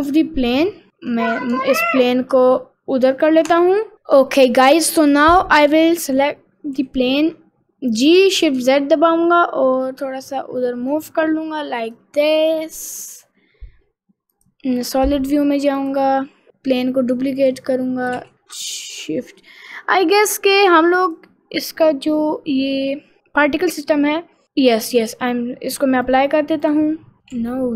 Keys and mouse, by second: 0.9 g, 5.2 click, 6.7 g, 12.8 middle click, 14.4 click, 15.8 click, 16.4 middle click, 17.5 click, 18.2 shift+s, 19.3 middle click, 19.8 middle click, 22.1 click, 23.2 click, 25.0 click, 26.1 click, 27.3 ctrl+z.